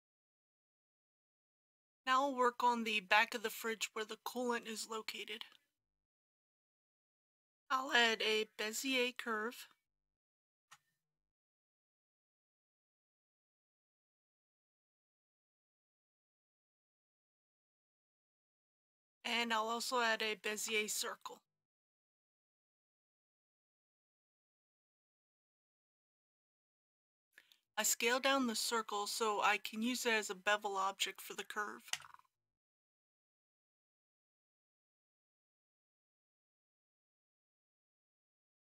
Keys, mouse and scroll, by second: 6.1 KP_1, 7.0 KP_3, 10.5 shift+a, 13.8 click, 15.1 g, 15.4 y, 17.2 click, 20.5 shift+a, 22.3 click, 23.6 g, 23.9 y, 26.3 click, 31.9 s, 37.9 click.